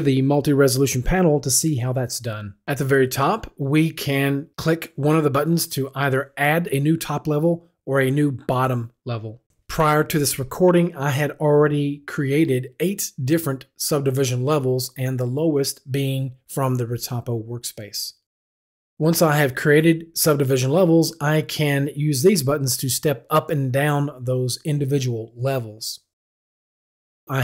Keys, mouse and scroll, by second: 23.0 click.